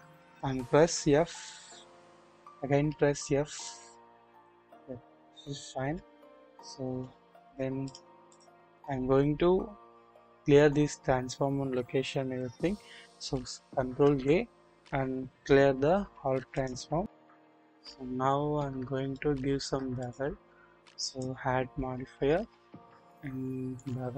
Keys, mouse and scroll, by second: 0.9 f, 2.1 click, 3.5 click, 3.5 typing, 4.4 click, 5.7 scroll down 1, 6.4 typing, 7.6 double click, 14.0 ctrl+a, 17.5 scroll up 1, 19.1-19.7 shift+middle drag, 23.8 click.